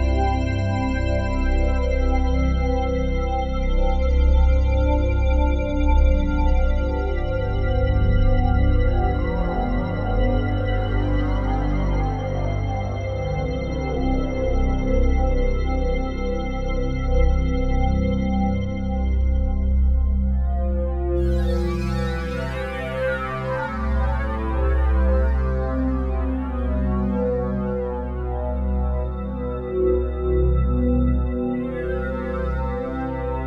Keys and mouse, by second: 1.0 click, 2.5-5.1 ctrl+alt+drag, 5.1-5.5 typing, 8.6-14.0 drag, 9.9 1, 15.0-21.1 drag, 21.1 g, 21.5 x, 22.8-27.0 drag, 25.4 typing, 26.6-27.0 typing, 27.4-30.5 drag, 29.7-30.9 typing, 32.2-33.2 drag, 33.2-33.4 typing.